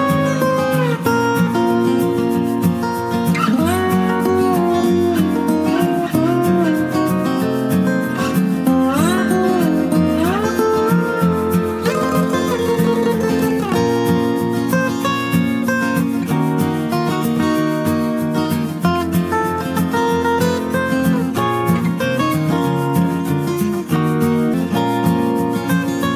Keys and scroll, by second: 5.2-9.5 typing, 11.9 Return, 15.4-19.0 typing.